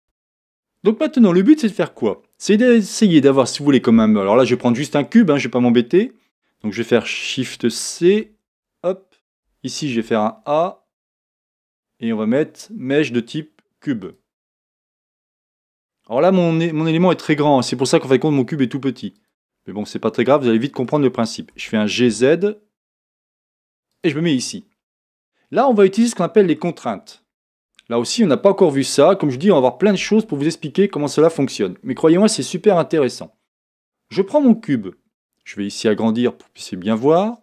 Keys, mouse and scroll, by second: 0.0-1.3 middle drag, 1.3 scroll up 1, 2.2-2.7 scroll down 1, 2.7 shift+middle click, 8.0 shift+c, 9.9 shift+a, 14.7 middle click, 15.6 scroll up 1, 16.2 middle click, 16.6 scroll down 1, 17.6-37.1 middle drag, 19.2 click, 21.6 g, 24.0 click, 25.2 scroll down 1, 37.1 click.